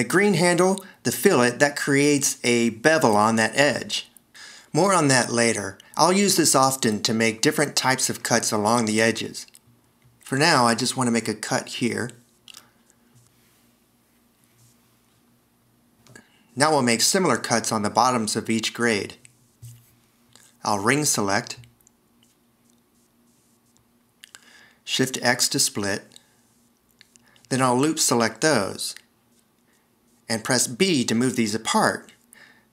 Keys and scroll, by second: 25.0 alt+r, 26.3 shift+x, 30.4 alt+e, 31.9 b.